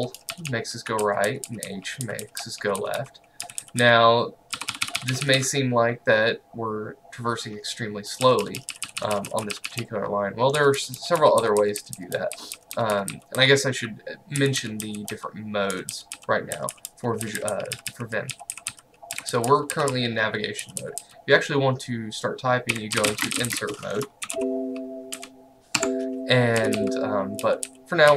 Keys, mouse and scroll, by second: 0.0-5.4 typing, 8.3-21.0 typing, 22.6-24.2 typing, 24.3 shift+Home, 24.4 Delete, 25.2 x, 25.8 Escape, 26.6-28.1 typing.